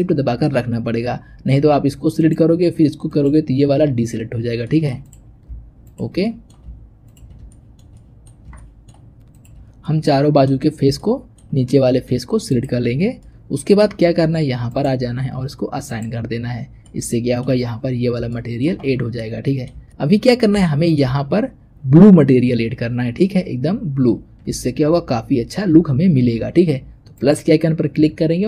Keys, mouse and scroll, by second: 2.0 click, 3.0 click, 4.5 middle click, 4.9 click, 5.7 shift+click, 6.1 middle click, 6.9 shift+click, 7.4-9.2 shift+middle drag, 9.2 shift+click, 9.5 scroll down 3, 9.7 middle click, 10.5-10.9 scroll up 4, 10.9-12.4 shift+middle drag, 12.4 shift+click, 12.8-13.1 scroll down 4, 13.1-14.6 middle drag, 14.6 click, 15.7-16.7 drag, 16.7 middle click, 17.5-18.0 scroll up 1, 18.0 scroll up 1, 18.2-20.0 shift+middle drag, 20.0-20.5 scroll up 1, 20.5-23.4 shift+middle drag, 27.0-28.4 drag.